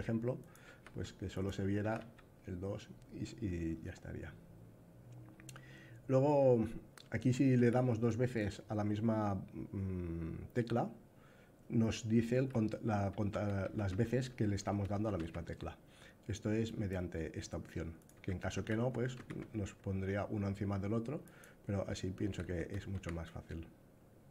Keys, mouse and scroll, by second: 0.1 click, 1.0 q, 1.7 a, 7.2 a, 11.6 a, 12.0 a, 13.0 a, 14.2 a, 14.6 a, 14.8 a, 14.9 a, 16.3 click, 17.9 a, 18.2 a, 20.9 click, 21.8 a, 22.2 a.